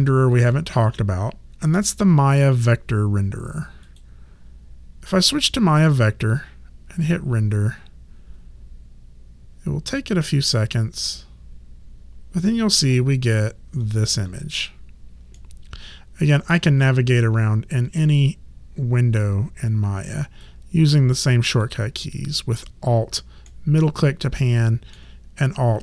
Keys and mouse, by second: 0.3 click, 3.9 click, 7.0 click, 15.4 alt+middle click, 18.0 click, 20.9 click, 23.4 alt+middle click.